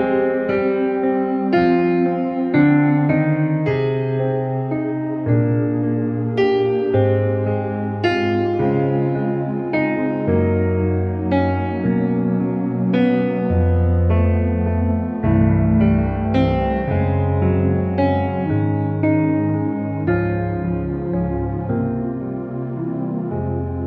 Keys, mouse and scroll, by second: 0.1 ctrl+-, 0.9 space, 1.0-1.4 click, 1.3 space, 1.8 ctrl+=, 2.6 space, 3.0-3.6 space, 3.8 click, 6.3 ctrl+-, 8.3 shift+F6, 10.6 shift+F6, 10.9 ctrl+alt+r, 16.4 space, 16.6 click, 16.7-17.1 space, 19.2 [, 19.4 [, 19.6 [, 20.5-22.7 drag.